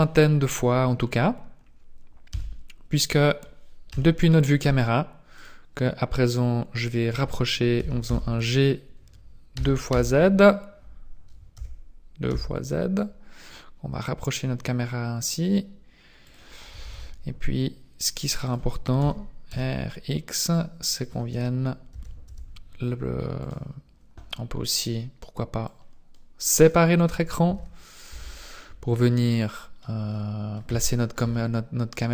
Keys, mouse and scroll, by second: 2.3 Tab, 3.9 KP_0, 5.3 right click, 7.7 g, 16.7 g, 19.0 r, 21.9 g, 25.6 click, 27.5 t, 27.8 n, 28.1 t, 28.2 n, 28.7-29.1 scroll down 2, 29.1 middle click, 30.1 middle click, 30.8 shift+middle click, 31.3 middle click.